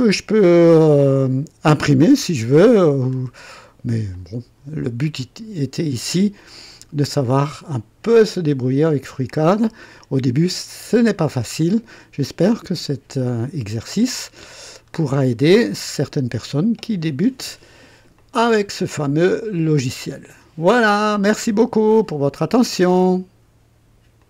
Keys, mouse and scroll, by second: 4.1-7.1 drag, 7.2-9.1 drag, 9.3 click, 11.1-15.0 drag, 15.4 scroll up 1, 15.9 right click, 18.2-21.0 drag, 22.8 right click, 24.2 click.